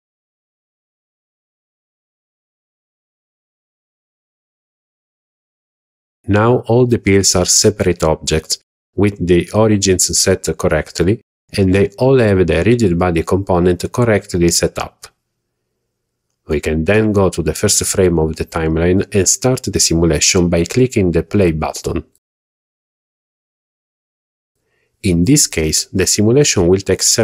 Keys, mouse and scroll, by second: 3.3 right click, 3.7 click, 5.6 click, 6.2 click, 6.8 click, 7.5 click, 8.5-9.1 scroll down 3, 9.4-9.8 shift+middle drag, 10.3-10.6 shift+middle drag, 11.6 shift+middle click, 12.2 shift+middle drag, 13.5-14.1 scroll up 3, 14.3-14.7 shift+middle drag, 14.9 scroll up 1, 15.5 scroll up 1, 15.9-16.6 shift+middle drag, 18.2 click.